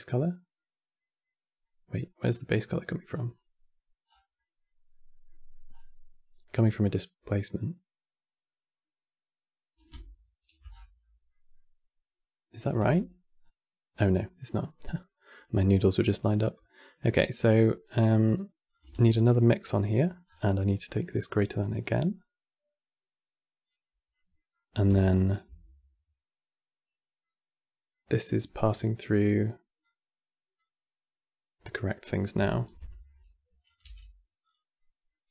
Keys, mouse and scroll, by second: 2.0-2.4 scroll up 1, 2.4 middle click, 2.8 scroll up 7, 3.1-3.8 scroll down 1, 3.8 scroll down 5, 4.1-5.4 middle drag, 5.4-5.9 scroll up 8, 10.4-10.7 scroll down 9, 10.7-13.1 middle drag, 13.1-13.9 drag, 13.9-14.2 middle drag, 14.2 scroll up 2, 14.5-17.0 middle drag, 17.0 scroll down 3, 17.3-18.4 middle drag, 18.4 click, 18.6 shift+d, 19.1 middle click, 19.3-19.6 scroll up 6, 19.6 middle click, 20.0-20.3 scroll down 5, 21.2 click, 23.8 middle click, 24.2 scroll up 3, 24.8 ctrl+shift+click, 26.9 scroll down 1, 26.9-29.5 middle drag, 29.5 click, 32.2 ctrl+shift+click, 32.5-33.4 middle drag, 33.4 click, 33.5 g, 34.5 middle click, 35.0 scroll up 2.